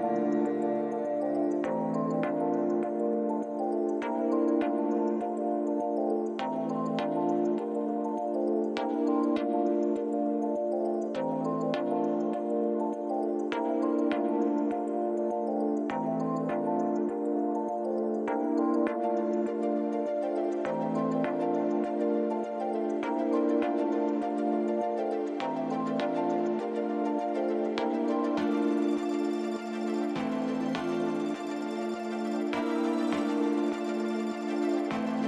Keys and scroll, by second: 0.5 g, 5.2 Tab, 5.7 alt+a, 6.2 shift+z, 8.6 r, 16.2 Tab, 17.0 ctrl+r, 17.4 Return, 18.0 shift+z, 19.4 x, 22.1 f, 24.7 shift+z, 25.8 3, 30.0 r, 34.3 1.